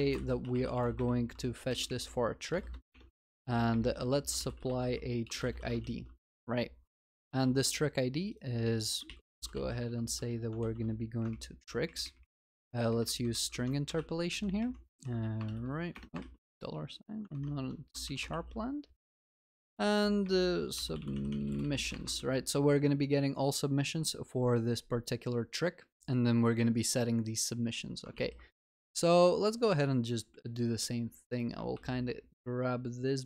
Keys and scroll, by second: 6.0 ctrl+s, 7.4 ctrl+c, 10.6 ctrl+v, 18.4 ctrl+s, 28.2 ctrl+s, 31.7 ctrl+c.